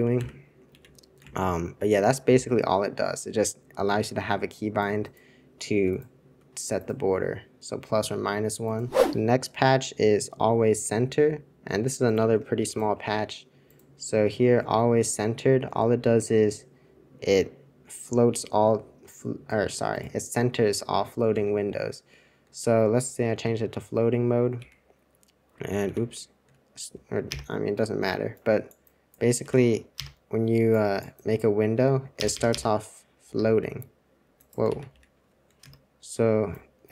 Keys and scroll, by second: 0.2 super+b, 0.7 super+c, 1.2 super+2, 21.4 super+1, 23.2 alt+super+2, 24.5 super+e, 25.8 super+c, 27.2 super+Return, 29.4 super+c, 29.9 super+Return, 32.1 super+Return, 32.3 super+Return, 32.4 super+Return, 33.2 super+c, 33.4 super+c, 34.6 super+c, 34.9 super+c, 35.6 super+Return.